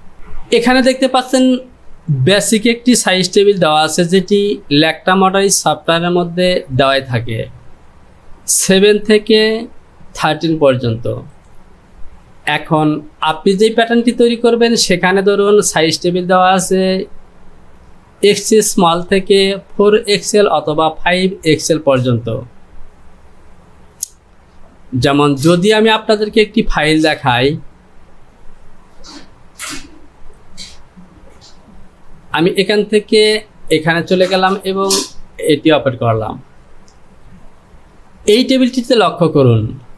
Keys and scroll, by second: 0.1 F10, 3.4 j.